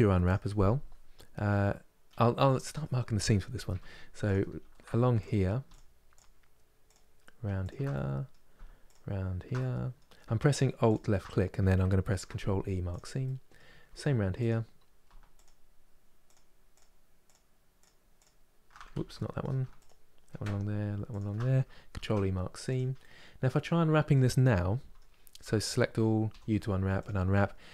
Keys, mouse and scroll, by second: 4.0 alt+click, 4.9 alt+click, 5.4 alt+shift+click, 5.8 alt+shift+click, 6.6 alt+shift+click, 7.3 alt+shift+click, 7.6-8.6 middle drag, 8.6 alt+shift+click, 9.2 middle click, 10.2 alt+shift+click, 10.6 alt+shift+click, 12.6 ctrl+e, 12.9-14.1 middle drag, 14.1 alt+click, 15.1 alt+shift+click, 16.0 alt+shift+click, 16.4 alt+shift+click, 17.0 alt+shift+click, 17.5 alt+shift+click, 17.9 alt+shift+click, 18.6 ctrl+z, 18.8 middle click, 19.5 alt+shift+click, 20.8 alt+shift+click, 22.4 ctrl+e, 22.7-25.1 middle drag, 25.1 a, 26.7 u.